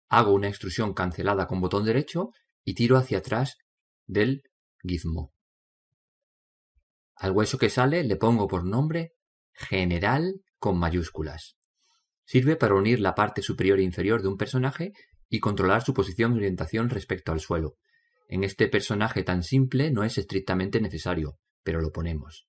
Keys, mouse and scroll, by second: 1.5 e, 3.1 click, 7.7 right click, 8.9 click.